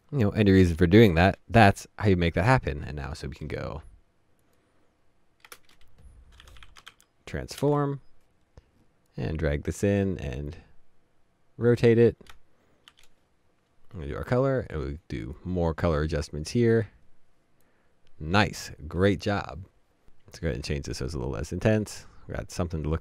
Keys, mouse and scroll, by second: 2.3 %, 3.4 right click, 5.5-7.3 typing, 8.4 Return.